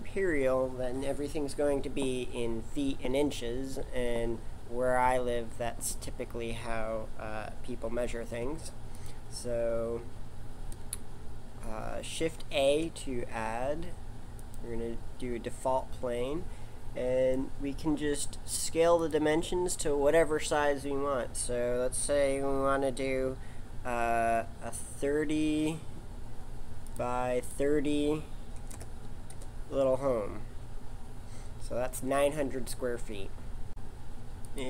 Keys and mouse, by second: 8.4 Delete, 12.1 shift+a, 19.0 click, 27.5 click, 30.6-34.5 middle drag.